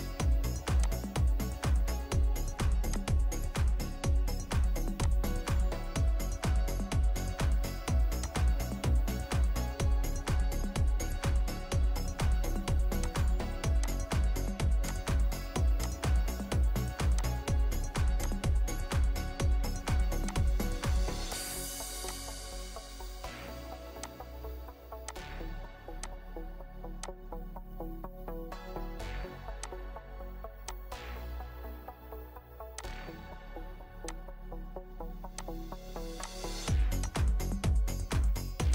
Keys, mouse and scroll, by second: 1.2 Return, 1.2 1, 6.6 Escape, 6.8 Escape, 8.7 scroll up 1, 8.8-10.7 scroll down 1, 12.0 Escape, 13.8 ctrl+click, 14.9 ctrl+click, 15.8 ctrl+click, 17.1 ctrl+click, 18.2 ctrl+click, 24.0 ctrl+click, 25.1 ctrl+click, 26.0 ctrl+click, 27.0 ctrl+click, 29.6 ctrl+click, 30.7 ctrl+click, 35.4 ctrl+click, 36.2 ctrl+click, 37.1 ctrl+click.